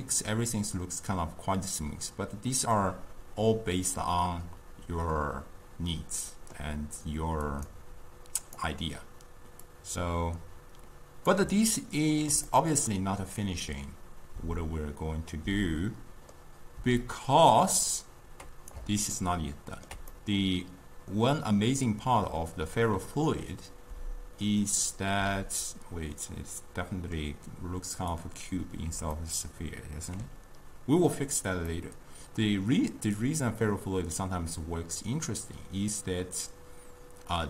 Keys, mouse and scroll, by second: 0.0-3.1 middle drag, 7.5-8.6 drag, 9.7-11.9 drag, 11.9-15.6 ctrl+middle drag, 17.1-19.2 drag, 19.2-23.2 ctrl+middle drag, 28.1 click, 29.2-30.4 ctrl+middle drag, 30.4-31.7 scroll down 2, 31.7 scroll up 2, 31.8-34.8 middle drag.